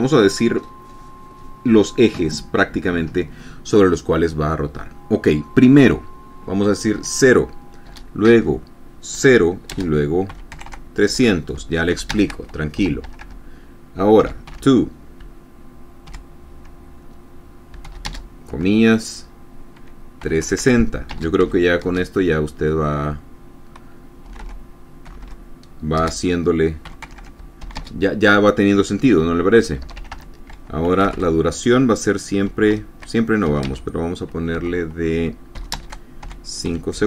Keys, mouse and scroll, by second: 7.5 KP_0, 8.4 space, 9.6 KP_0, 10.3 space, 10.8 KP_3, 11.1 KP_0, 12.6 shift+space, 13.3 Return, 13.6 Tab, 14.5-15.5 typing, 16.6 shift+0, 18.6 shift+space, 20.8-22.4 typing, 24.8-28.3 typing, 30.4 Return, 30.5 Tab, 31.1-32.2 typing, 33.3 shift+0, 34.2 space, 35.1 BackSpace, 36.3 shift+space, 36.8 shift+5.